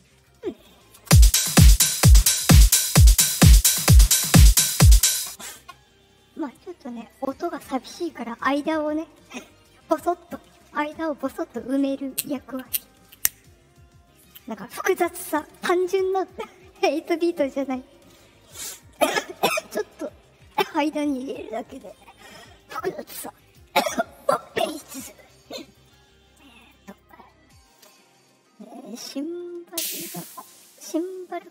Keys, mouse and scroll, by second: 0.0-0.6 scroll up 4, 0.9 space, 4.8 space, 23.4 click, 25.6 right click, 26.5 click, 26.9 click, 27.7 click, 29.6 click, 30.3 right click.